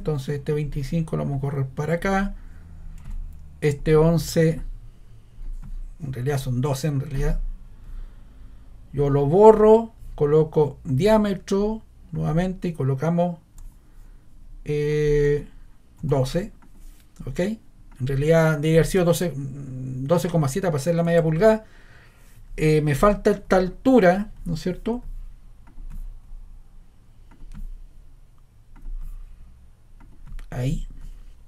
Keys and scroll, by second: 3.0 ⟲, 6.2 ⟲, 13.6 1, 15.2 1, 16.0 2, 21.0 Return, 21.4 scroll.